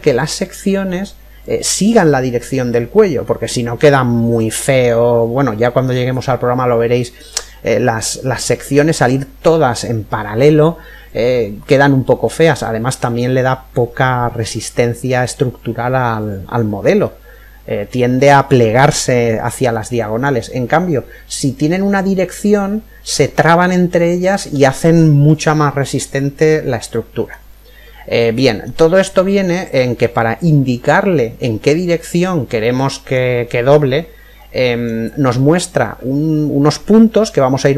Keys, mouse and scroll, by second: 14.3-16.1 middle drag, 19.3-21.1 middle drag, 23.2-26.7 middle drag, 27.0-27.6 scroll down 1, 27.6-29.3 middle drag, 29.3-30.6 scroll up 1, 30.6 scroll up 1, 30.8 middle click, 32.2-35.9 middle drag.